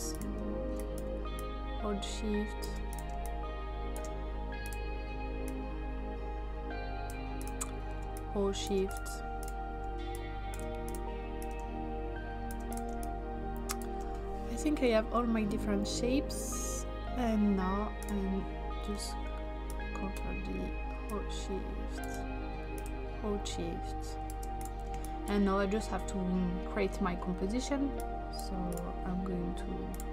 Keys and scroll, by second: 3.1 space, 12.9 space, 18.8 ctrl+d, 24.9 space.